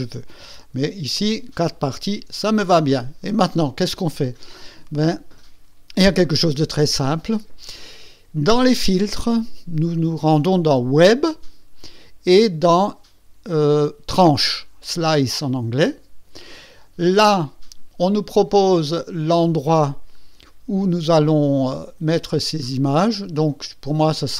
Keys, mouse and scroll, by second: 1.1 ctrl+z, 8.8 click, 15.3 click, 20.1 click, 21.6-23.3 scroll up 7.